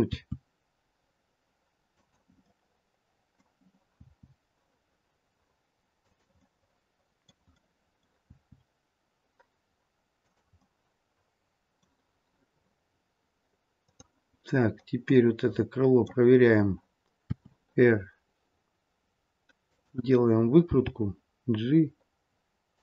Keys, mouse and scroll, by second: 0.1 r, 2.4 middle click, 3.9 r, 6.3 middle click, 7.5 middle click, 8.2 r, 10.5 middle click, 15.0 middle click, 17.2 r, 20.6 g.